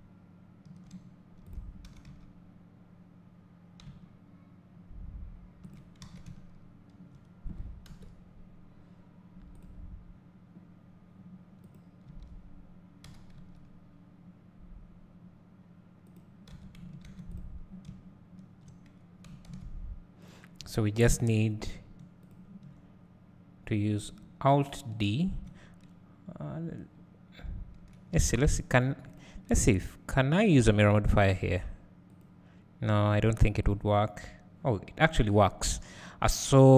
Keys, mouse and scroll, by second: 1.9 s, 6.0 alt+a, 7.9 KP_7, 9.6 click, 12.1 Tab, 13.1 g, 16.1 click, 16.5 Tab, 17.4 click, 17.9 `, 20.3 click, 21.1 KP_7, 22.3 shift+click, 28.2 alt+a, 33.7-36.7 drag.